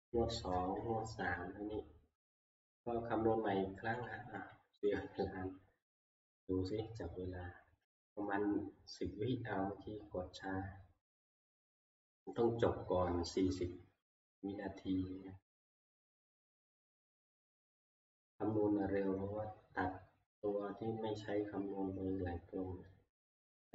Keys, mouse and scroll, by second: 0.7 Down, 0.7 F2, 0.7 Up, 4.0 click, 6.1 click, 10.7 click.